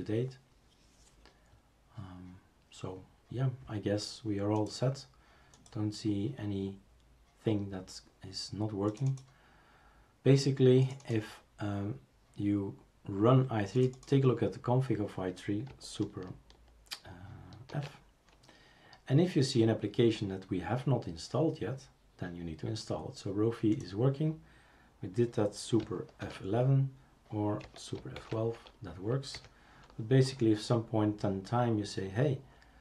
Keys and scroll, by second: 17.7 super+f, 26.2 super+F11, 27.6 Escape, 28.1 super+F12, 29.3 Escape.